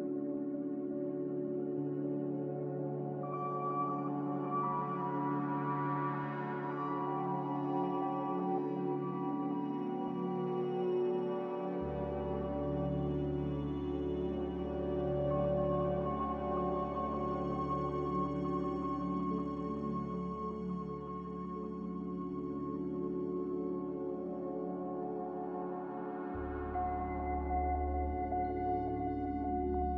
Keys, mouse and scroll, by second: 1.6 m, 2.6 5, 2.9 Return, 11.2 b, 12.5 ctrl+b, 15.0 b, 27.1 z.